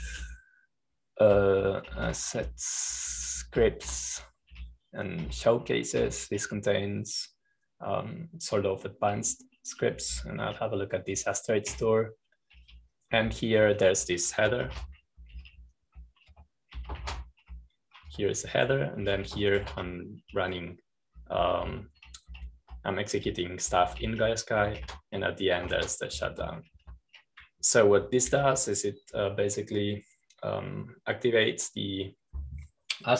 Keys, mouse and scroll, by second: 0.0-2.1 typing, 3.2-7.9 typing, 11.0-12.2 typing, 13.6-31.5 typing, 18.2 Escape.